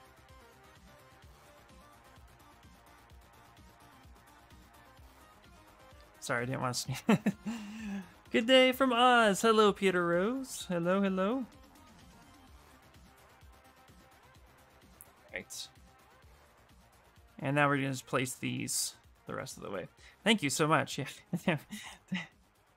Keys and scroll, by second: 22.6 alt+x.